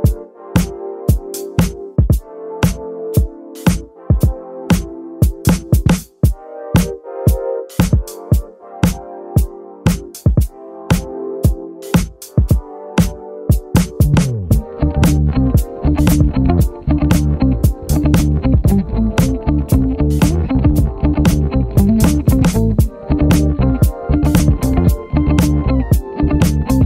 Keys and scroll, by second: 0.2 super+z, 2.3 alt+super+z, 10.1 super+z, 14.8 BackSpace, 15.7 BackSpace, 21.3 b.